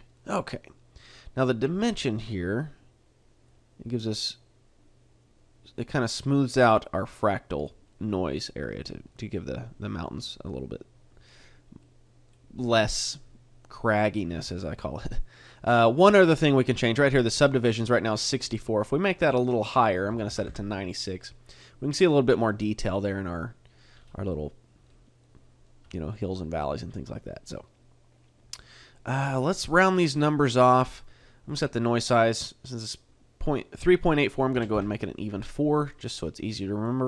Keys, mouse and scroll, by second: 3.5 click, 7.9 middle click, 9.1 middle click, 11.8 middle click, 15.8 click, 18.1 middle click, 19.1 click, 22.0 middle click, 22.7 middle click, 23.9-24.3 scroll up 3, 24.3 middle click, 25.2 middle click, 25.8 scroll down 2, 26.1 middle click, 29.3 click, 36.4 click.